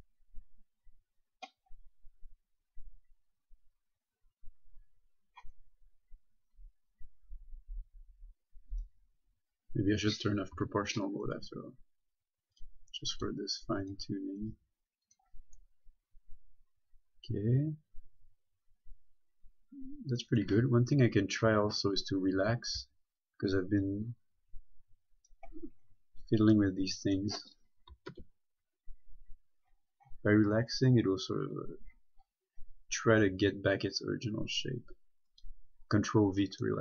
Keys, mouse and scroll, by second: 1.9-3.7 scroll up 1, 5.6-6.8 scroll down 1, 8.9 click, 10.8 o, 11.5 right click, 11.7 g, 12.8 click, 13.4 right click, 13.5 g, 14.0 click, 14.7 right click, 14.8 g, 15.3 click, 15.8 middle click, 21.2 scroll down 1, 22.8-23.1 typing, 24.1 click, 26.1-26.5 scroll up 1, 26.8 middle click, 28.4 ctrl+v, 28.9-29.3 scroll up 1, 29.9 scroll down 1, 30.4-31.7 scroll up 1, 31.7-32.5 scroll down 1, 32.5-33.3 scroll up 1, 34.5-35.6 scroll down 1, 35.6 click.